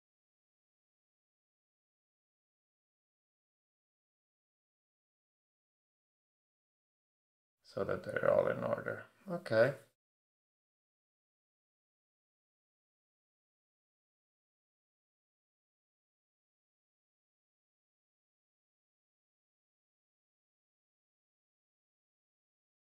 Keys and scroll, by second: 0.1 shift+Up, 2.2 shift+Up, 5.9 Up, 20.8 super+p.